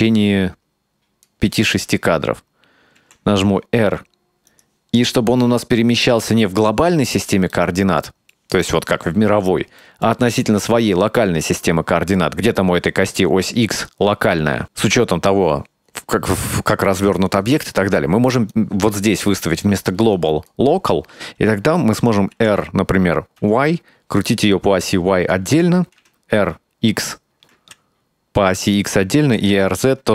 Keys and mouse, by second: 3.1 r, 7.6-8.5 middle drag, 9.9 middle click, 11.6-12.3 middle drag, 18.6-20.8 drag, 22.4 r, 25.6 t, 26.1 r, 29.3 r.